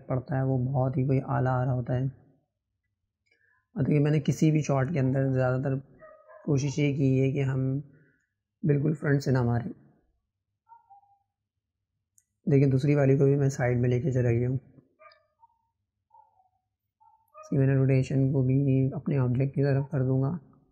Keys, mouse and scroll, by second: 6.2 KP_0, 9.1 click, 10.6-13.6 drag, 14.1-15.7 shift+middle drag, 15.7 click, 18.0 click.